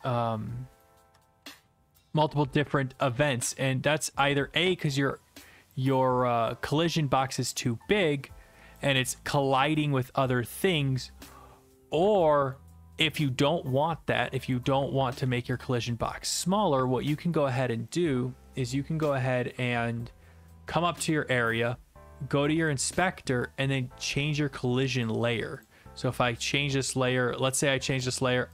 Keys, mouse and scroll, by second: 0.7-2.2 typing, 3.2 right click, 5.7 click, 6.7 click, 8.7 click, 9.0-12.3 typing, 12.5 right click, 14.8-15.2 typing, 15.5-17.9 right drag, 17.9-18.9 drag, 20.9-21.9 drag, 22.7 click, 25.0 click, 25.6 click, 26.6 click, 27.7 click, 28.0 click.